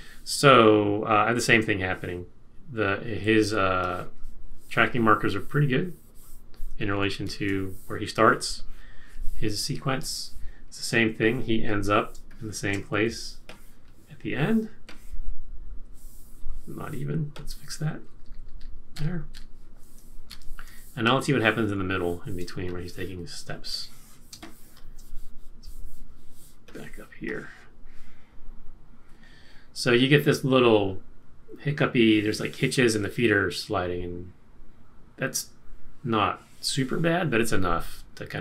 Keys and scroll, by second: 3.4 z, 6.9 super+-, 9.6 super+-, 12.1 space, 12.9 z, 18.0 Left, 18.1 Left, 18.2 Left, 18.4 Left, 18.9 Left, 20.3 super+-, 22.4 space, 24.3 space.